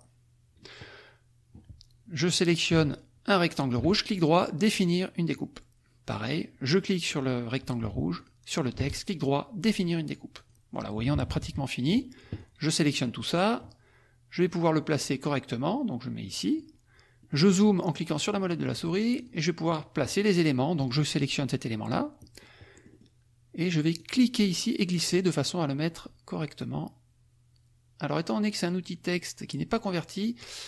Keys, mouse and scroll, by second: 2.9 shift+click, 3.9 shift+right click, 5.3 click, 6.2 click, 8.3 shift+click, 8.9 shift+right click, 10.0 click, 11.1 -, 12.3 click, 13.3 click, 14.3-16.7 drag, 17.2-18.8 drag, 19.2 click, 19.7 click, 20.9 click, 22.9 click, 23.9-30.6 drag.